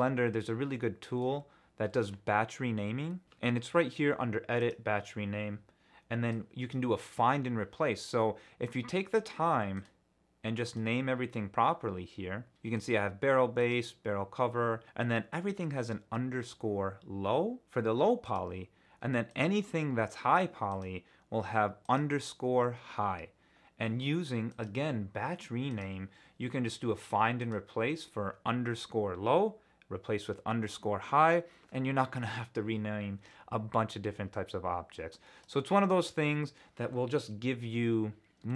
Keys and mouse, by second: 0.7 middle click, 1.3 Tab, 3.2-9.8 drag, 10.7 click, 13.6 click, 18.2 click, 19.3 click, 24.6-36.4 drag.